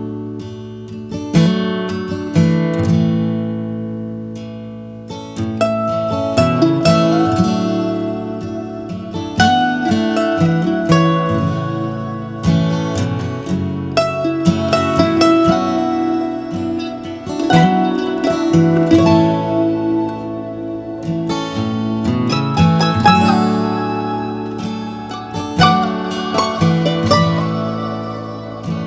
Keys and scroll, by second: 3.2 Right, 3.4 Right, 3.6 Right, 3.8 Right, 4.0 Right.